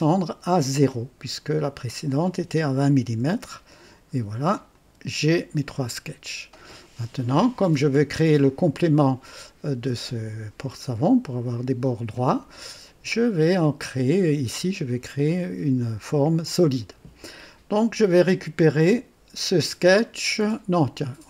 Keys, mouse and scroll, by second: 1.4 click, 3.2 KP_0, 4.7 click, 5.3-7.0 drag, 7.7-8.5 drag, 14.0-14.7 drag, 18.6 click.